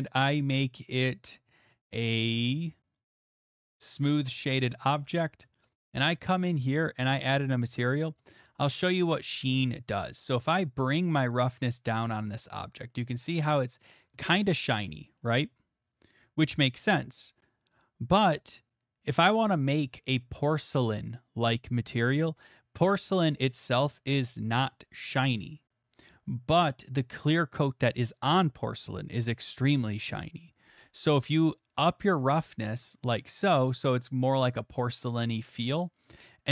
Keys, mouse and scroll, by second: 0.9 shift+middle click, 1.5 click, 1.8 middle click, 2.1 click, 3.8 click, 4.5 middle click, 4.7 shift+middle click, 5.0 middle click, 5.2 middle click, 5.8 middle click, 6.0 middle click, 6.1 middle click, 9.7 shift+middle click, 10.3 click, 10.6 shift+middle click, 10.9 middle click, 12.2 click, 13.3 middle click, 13.9 click, 15.2 middle click, 21.5-25.0 drag, 25.0 right click, 33.6-35.4 drag, 35.4-36.5 middle drag.